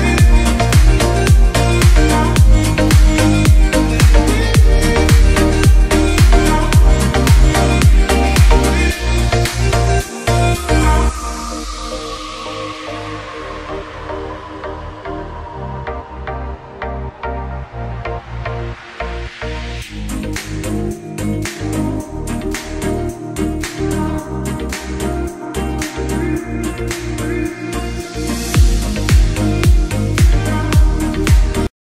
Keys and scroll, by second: 4.1 F2, 5.0 F6, 5.7 Escape, 8.2 ctrl+space, 13.0 shift+Page_Up, 14.3 shift+F11, 16.2 Escape, 18.4 shift+Page_Up, 21.8 F4, 27.7 F3, 27.9 Escape, 30.5 shift+F2, 31.4 F9.